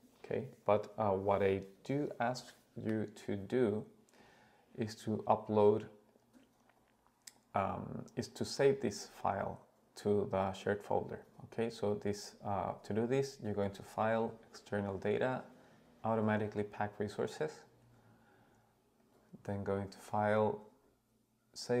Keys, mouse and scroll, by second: 6.1-17.4 drag, 19.0-21.8 drag.